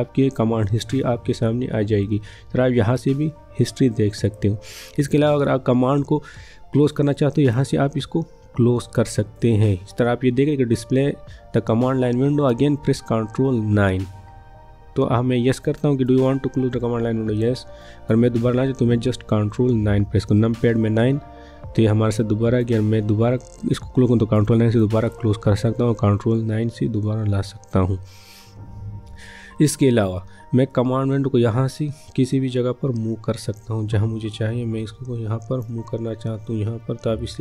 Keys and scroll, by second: 19.8 ctrl+9, 26.9 ctrl+9.